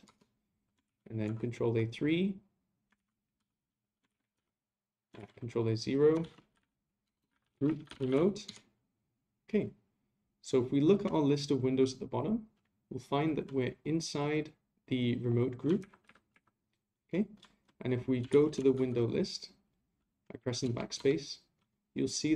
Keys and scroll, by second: 0.8 ctrl+a, 3.0 ctrl+a, 4.1 ctrl+a, 5.2 ctrl+a, 15.8 ctrl+Right, 16.3 ctrl+Right, 18.3 ctrl+a.